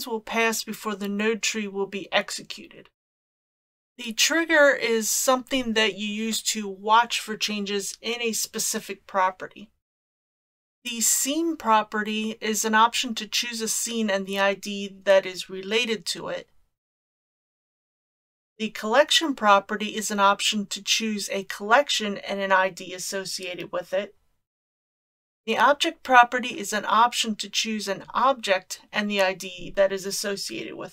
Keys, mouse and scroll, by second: 10.2 click, 18.1-18.8 drag.